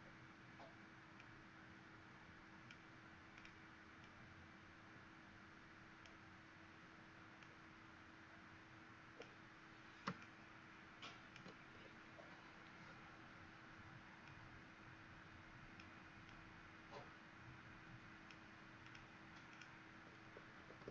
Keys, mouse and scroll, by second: 1.1 click, 3.9 click, 7.3 click, 10.1 alt+click, 12.8 scroll down 1, 14.2 click, 20.3 Escape, 20.6 Escape.